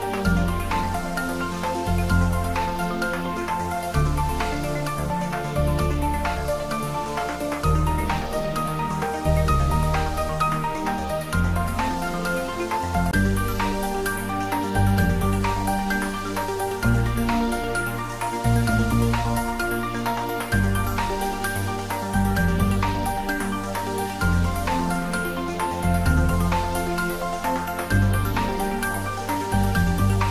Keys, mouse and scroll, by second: 2.8 click, 3.1 alt+h, 4.5 scroll down 1, 5.2-7.0 middle drag, 7.0-7.8 scroll up 1, 8.0 shift+z, 8.6 middle click, 9.8 click, 10.7 shift+click, 12.0 shift+click, 14.4 shift+click, 17.3-17.7 typing, 18.5 click, 18.8 middle click, 19.8 shift+z, 20.3 scroll down 1, 21.1 s, 22.4 click, 24.5 scroll up 1, 25.8 g, 27.8 click, 28.6-30.1 typing.